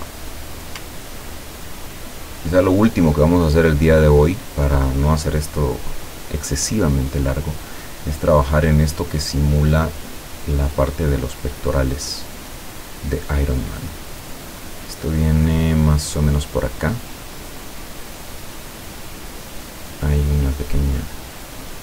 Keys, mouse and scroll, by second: 1.4 ctrl+scroll up 1, 6.7 click, 18.3 click, 20.5 click, 21.7 click.